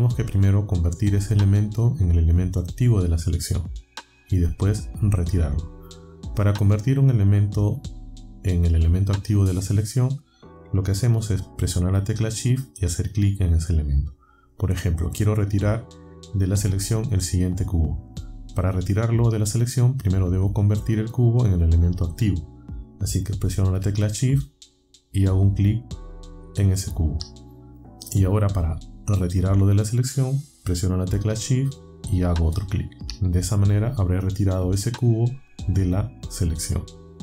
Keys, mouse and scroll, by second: 26.2-26.5 shift+scroll, 32.4 shift+click.